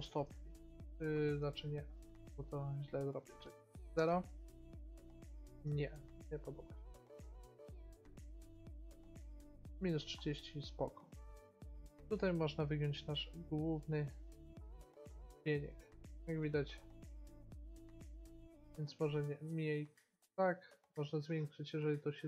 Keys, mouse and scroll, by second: 3.1-5.0 drag, 5.3-8.1 middle drag, 8.1 click, 12.3-13.9 drag, 18.9-22.2 drag.